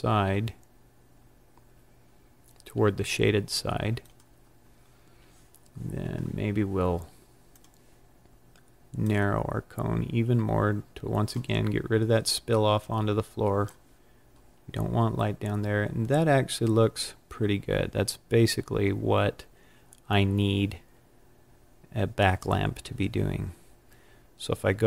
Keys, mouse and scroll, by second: 4.0 click, 7.4 click, 9.0 click, 12.7 click.